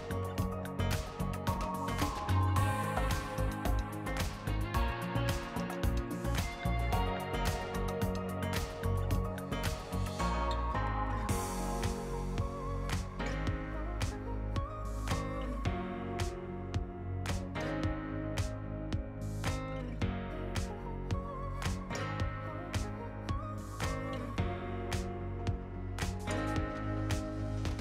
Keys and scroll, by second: 2.4 Return, 2.8 t, 4.3 ctrl+s, 5.2 r, 6.8 r, 9.3 shift+3.